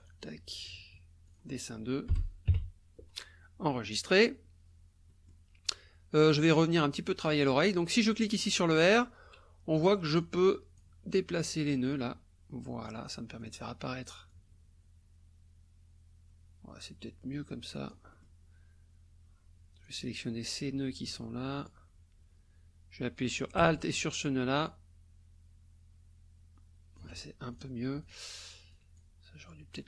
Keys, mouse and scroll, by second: 0.0 click, 1.3 click, 2.1 Left, 2.5 KP_2, 3.9 click, 5.1 click, 6.5 click, 8.1 click, 8.6 click, 10.2 click, 11.6-13.0 drag, 13.4 click, 14.3-18.4 drag, 19.8-21.9 drag, 24.2-27.2 alt+drag, 27.5 alt+click, 28.0 alt+click, 28.7 click, 29.7-29.8 drag.